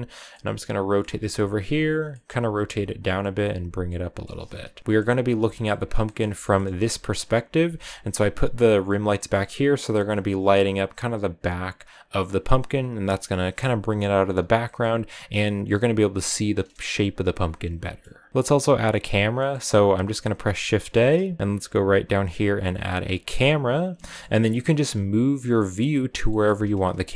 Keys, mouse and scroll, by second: 0.3 middle click, 0.9-3.5 typing, 2.0 middle click, 3.9-5.0 middle drag, 5.0-6.0 scroll up 5, 5.5 shift+middle click, 6.0-7.0 middle drag, 7.0 right click, 7.4 r, 9.1-16.7 middle drag, 16.7 a, 17.4-21.4 middle drag, 21.4 shift+a, 23.9-24.9 middle drag, 24.9-26.1 scroll up 1, 26.2-27.1 shift+middle drag.